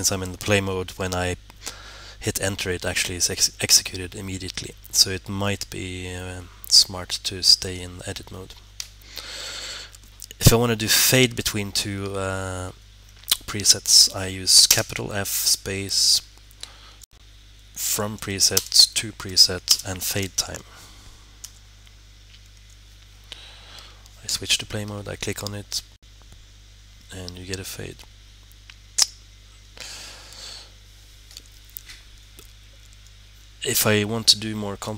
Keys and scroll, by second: 13.8 f, 17.7-20.6 typing.